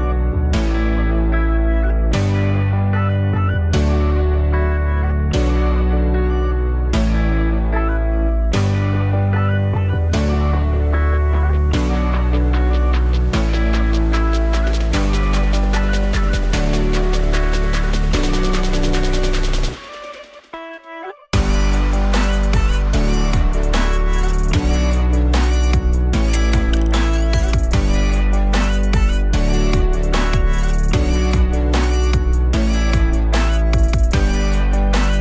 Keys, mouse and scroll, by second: 3.2 click, 4.5 click, 6.3 click, 7.4 click, 8.1 click, 10.6 scroll down 1, 12.2-17.0 drag, 18.6 click, 20.6 click, 21.2-23.8 drag, 25.5-28.3 drag, 34.6 click.